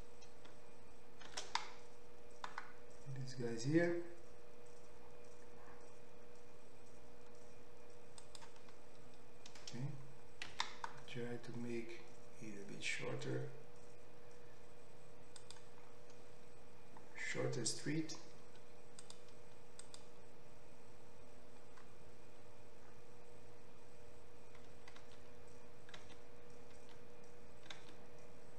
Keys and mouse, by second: 1.8 shift+d, 8.5-19.1 middle drag, 11.0 s, 19.1 click, 19.1 middle click, 19.9-21.9 drag, 21.9-28.5 middle drag, 25.6 ctrl+z, 26.6 ctrl+z, 27.3 ctrl+z, 28.2 ctrl+z.